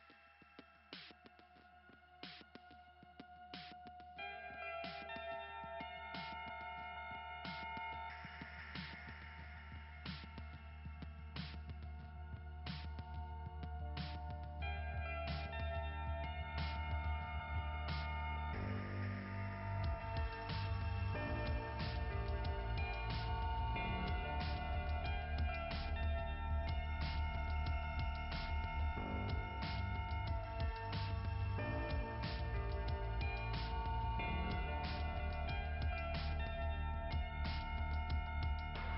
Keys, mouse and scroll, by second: 5.6 click, 5.8 click, 6.1 click, 6.4 click, 6.8 click, 7.0 click, 9.0 click, 9.4 click, 13.8-15.0 typing, 17.8 click, 18.1 click, 28.9-30.0 typing, 31.4 click, 31.4 ], 31.5 click, 35.5 click.